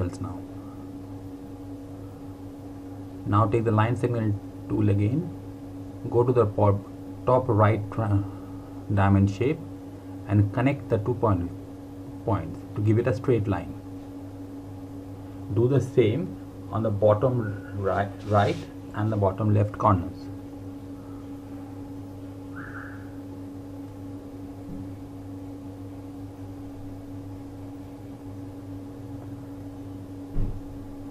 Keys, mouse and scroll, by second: 3.0 scroll down 1, 3.2 click, 9.8 click, 21.8 click, 28.6 click.